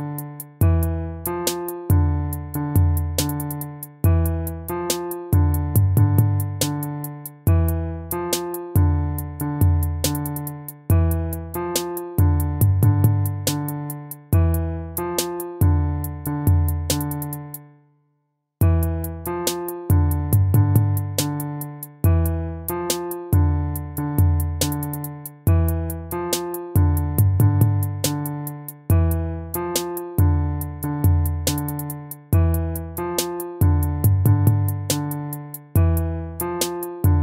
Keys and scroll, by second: 14.3 ctrl++, 17.9 ctrl+-, 22.2 ctrl+-, 23.7 BackSpace, 24.3 ctrl++, 32.6 ctrl+-.